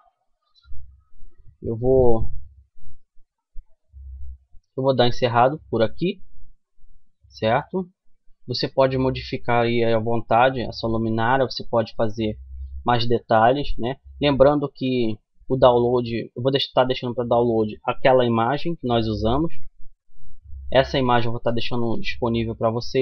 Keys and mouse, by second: 0.0 Escape, 0.6 middle click, 4.0-7.6 middle drag, 9.8 middle click, 10.2-11.6 middle drag, 13.5 middle click, 18.6 KP_1, 19.5 middle click, 21.8-23.0 middle drag.